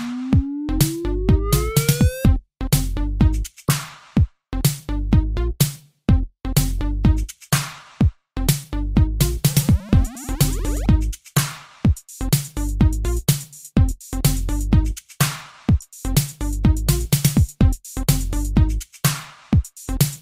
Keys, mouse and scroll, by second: 1.9 Escape, 4.0 right click, 4.7 Escape, 5.0 click, 8.8 click, 11.2 click, 12.7-13.1 typing, 16.7-17.7 typing, 17.8 Return.